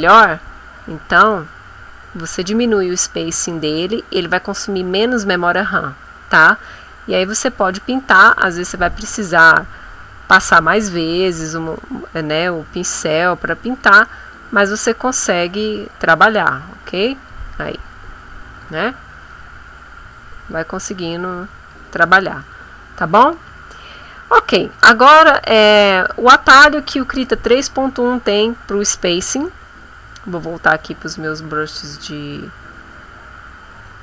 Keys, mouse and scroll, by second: 0.0 click, 1.0-5.8 drag, 6.1-9.2 drag, 10.9 click, 11.5 click, 12.2-13.9 drag, 14.0 click, 14.6 ctrl+click, 15.0-16.0 ctrl+drag, 16.2-17.4 ctrl+drag, 18.1 click, 19.2 click, 19.9 click, 20.7 click, 25.3 click, 26.3 click, 29.3 click, 30.6 click, 33.7 click.